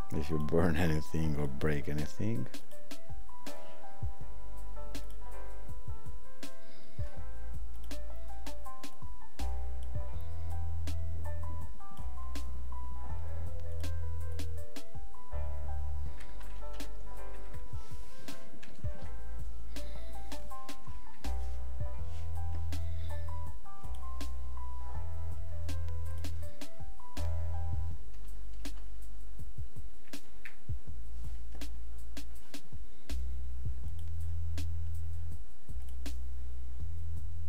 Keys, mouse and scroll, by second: 10.5 click, 20.8 click, 35.8 click.